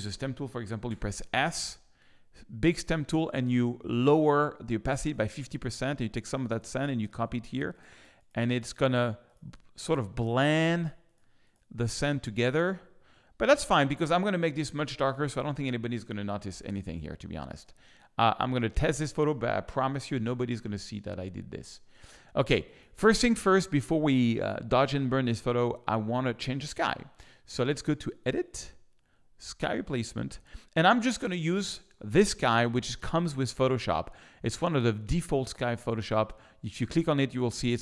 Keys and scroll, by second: 0.8 s, 1.9 ctrl+alt+s, 16.3 z.